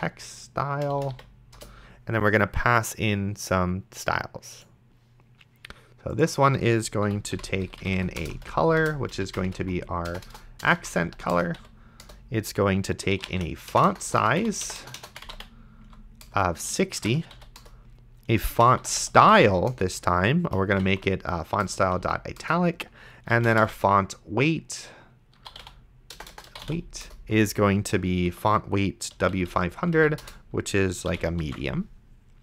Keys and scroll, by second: 0.0-1.1 typing, 1.6 Return, 7.3 ;, 7.8 Left, 8.2 Return, 8.3 c, 8.8 Return, 9.5-11.6 typing, 12.0 Return, 12.9-22.0 typing, 21.6 Return, 22.4 Return, 23.1-26.9 typing, 27.1 Return, 29.1 Down, 30.2 Return, 31.1 ,, 31.7 ctrl+s.